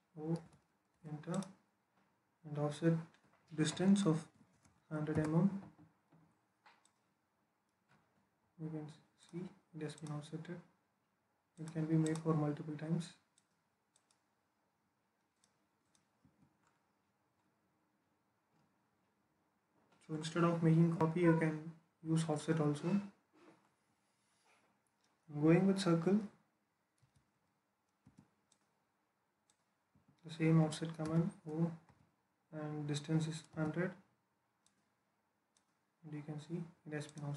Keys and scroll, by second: 0.2 o, 0.8 space, 4.1-4.4 typing, 4.9 Return, 16.0 Escape, 26.8 c, 27.9 space, 29.8 Escape, 30.9 o, 31.7 space, 33.3 space.